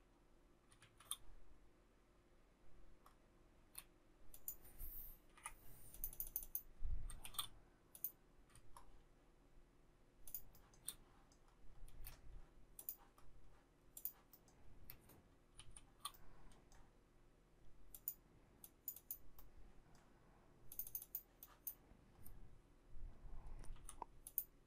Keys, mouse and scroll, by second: 0.8 shift+z, 3.6 space, 5.4 Delete, 7.3 shift+e, 8.8 shift+scroll, 10.3 shift+click, 10.6 shift+middle click, 10.7 shift+double middle click, 11.9 space, 15.6 shift+s, 23.8 m.